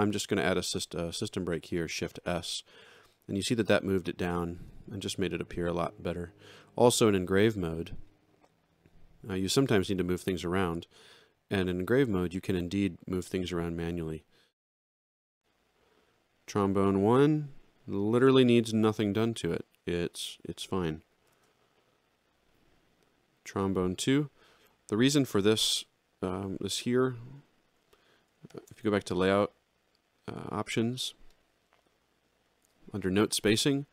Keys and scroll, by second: 0.6 shift+s, 13.9 z, 21.3 alt+shift+], 28.5 ctrl+shift+l.